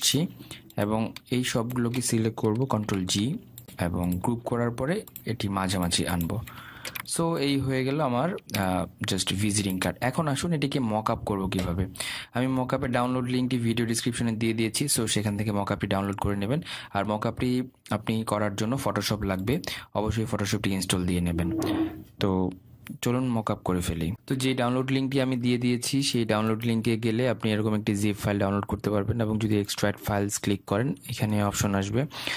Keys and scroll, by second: 3.4 ctrl+g.